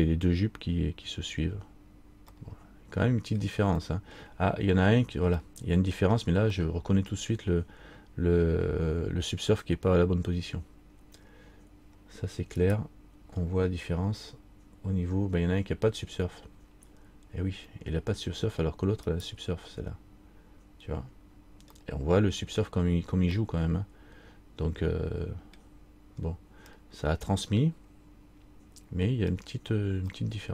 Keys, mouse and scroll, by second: 2.5 middle click, 4.0 middle click, 5.6 middle click, 6.7 middle click, 12.8 right click, 19.3 right click, 22.0 middle click, 23.5 middle click, 26.3-26.8 scroll up 2, 29.5 middle click.